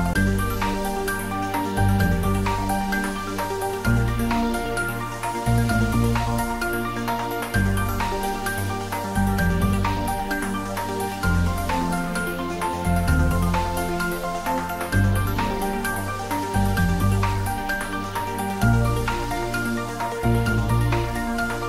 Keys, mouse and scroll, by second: 0.2 ctrl+z, 1.1 click, 1.8-3.2 scroll up 1, 3.2 g, 8.2 space, 9.3 scroll up 1, 10.6 r, 11.8 click, 12.5 scroll down 1, 12.9 shift+z, 13.3 scroll down 1, 14.0 Tab, 14.2-14.6 scroll up 1, 14.6-16.8 middle drag, 16.9-17.6 scroll down 1, 17.6 click, 18.1 scroll down 1, 18.5-19.8 middle drag, 20.1 click.